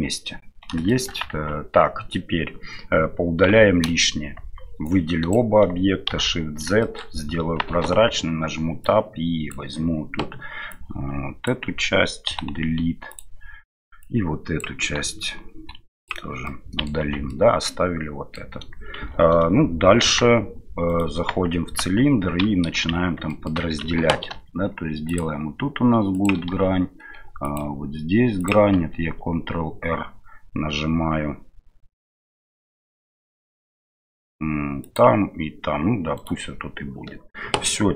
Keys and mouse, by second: 0.8 shift+middle click, 1.3 Tab, 4.9-5.3 drag, 6.1 shift+z, 6.8 middle drag, 7.7 Tab, 8.8 click, 10.8 click, 12.2 Delete, 14.1 click, 16.4 middle click, 17.0 Tab, 17.2-18.4 middle drag, 19.0 shift+z, 20.0 KP_1, 20.8-21.8 right drag, 21.8 Tab, 23.3 shift+middle click, 24.3 ctrl+r.